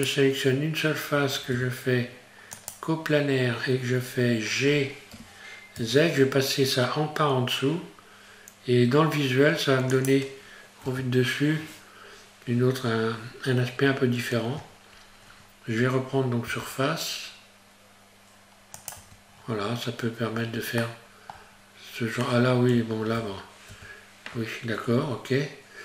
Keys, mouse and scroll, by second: 1.5 q, 3.6-4.6 scroll down 1, 5.1 g, 12.1 scroll down 1, 12.3 scroll up 1, 12.5 scroll down 1, 16.5 s, 19.0 Tab, 19.3 scroll down 1, 20.8 shift+middle click, 21.5-22.0 scroll down 1, 23.2 ctrl+z, 25.1 scroll up 1.